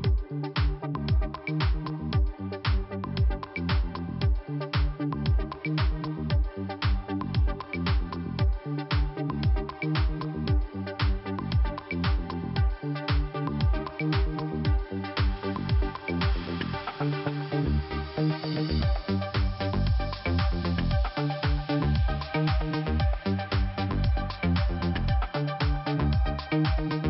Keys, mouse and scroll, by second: 2.8 click, 2.9 click, 3.8 click, 3.9 click, 4.5 click, 5.0-5.4 scroll down 2, 6.6 click, 11.5-11.9 scroll up 1, 12.2 scroll up 1, 13.3 scroll up 1, 15.2 scroll down 2, 16.4-16.7 scroll up 1, 16.8 click, 16.9 click, 19.2 click, 19.2 click, 20.7 click, 20.7 click, 21.5 scroll up 2, 22.7 click, 25.6 click, 25.6 click, 25.7 click, 26.0 click, 26.6 click, 26.6 click.